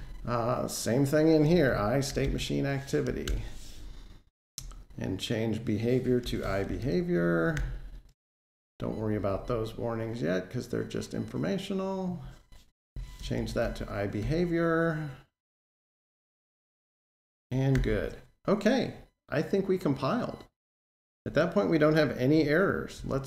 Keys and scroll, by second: 3.1 Return, 7.3 Escape, 7.4 alt+Page_Down, 13.0 Escape, 14.0 Delete, 15.5 Delete, 17.5 super+z.